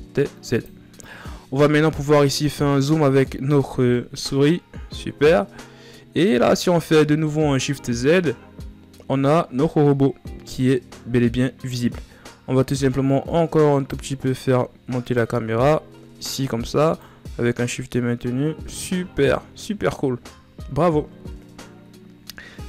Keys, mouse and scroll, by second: 1.1-4.3 shift+scroll up 14, 4.3 ctrl+scroll down 1, 5.0 scroll down 1, 6.3 shift+z, 12.4-15.0 drag, 15.2 shift+z, 17.2-19.1 shift+drag, 19.1-19.6 scroll down 3, 19.6 a, 20.0-21.9 scroll down 1, 21.9-22.4 scroll down 1, 22.4-22.6 scroll down 1.